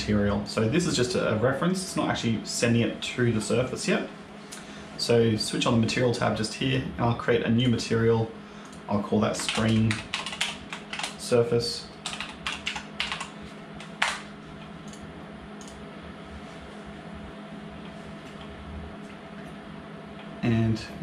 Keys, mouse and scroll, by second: 0.3 click, 5.3 click, 7.4 click, 8.5 click, 10.1 e, 14.7 click, 15.5 click.